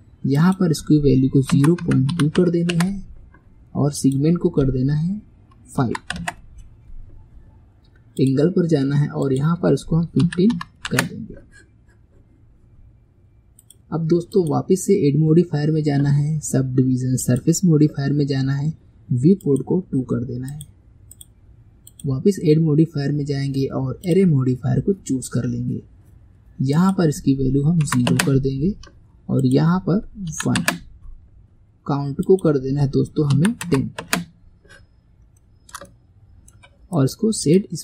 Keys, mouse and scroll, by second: 4.0-7.2 drag, 8.2 click, 8.7-9.3 scroll down 3, 9.3-12.3 drag, 12.6-13.6 scroll up 3, 13.6 click, 14.4 click, 19.5-20.6 drag, 21.2 click, 24.2 click, 26.8-35.0 drag, 35.0-35.4 scroll down 2, 35.4-37.0 shift+middle drag, 37.0-37.8 right drag.